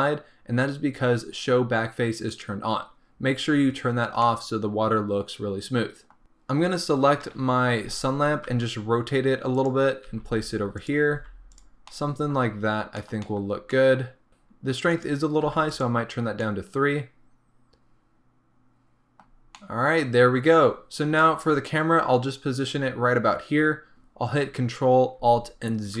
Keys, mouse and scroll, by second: 2.3 click, 4.1 scroll down 1, 4.3-6.2 middle drag, 6.2 click, 7.2 KP_7, 8.5 r, 9.8 click, 10.1 g, 11.0 click, 11.2 r, 11.6 click, 12.0-15.7 middle drag, 12.6 scroll up 2, 13.2-13.8 scroll down 4, 15.7 click, 16.4 scroll up 1, 16.5-26.0 middle drag, 19.3-19.6 scroll down 1, 21.0 scroll up 1, 22.6-24.2 scroll down 1, 24.2-26.0 scroll down 1.